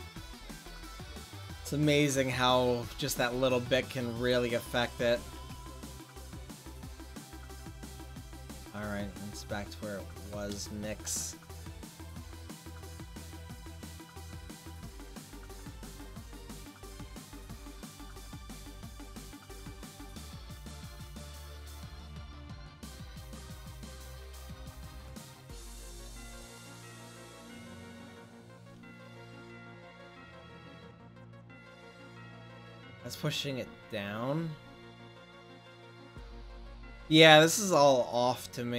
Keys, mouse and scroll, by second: 1.8-3.2 drag, 5.4 ctrl+z, 5.8 ctrl+z, 6.4 ctrl+z, 6.9 ctrl+z, 7.4 ctrl+z, 11.6-13.4 drag, 18.7-20.5 drag, 21.4 click, 29.8 f, 29.9 f.